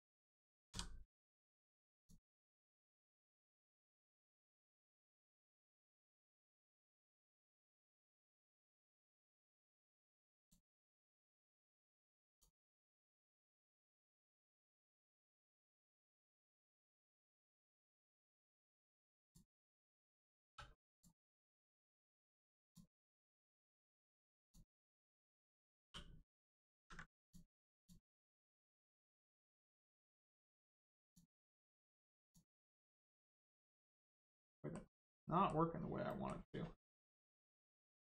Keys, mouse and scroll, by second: 0.6 v, 1.9 click, 4.2 click, 10.0 click, 13.7 click, 19.1 click, 20.4 3, 20.9 click, 23.6 right click, 24.3 click, 26.7 ctrl+z, 27.1 click, 30.2 l, 30.3 right click, 30.9 click, 33.3 middle click, 36.0 middle click.